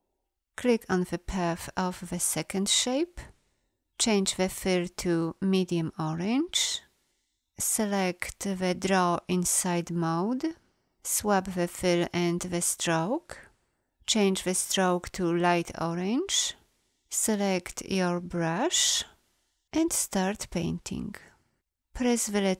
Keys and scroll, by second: 21.9 b.